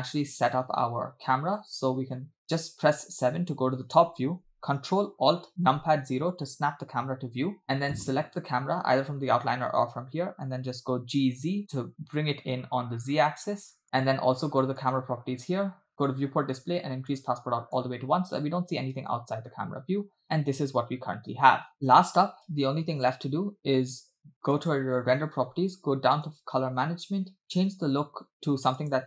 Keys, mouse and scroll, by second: 3.0 KP_7, 5.7 ctrl+alt+KP_0, 7.9 click, 10.8 g, 14.8 click, 16.0 click, 16.3-16.7 scroll down 1, 17.1 click, 19.1 space, 22.0 space, 22.5 space, 23.1 space, 24.6 click, 25.3 scroll down 2, 26.2 click, 26.5 scroll down 2, 27.4-29.0 drag.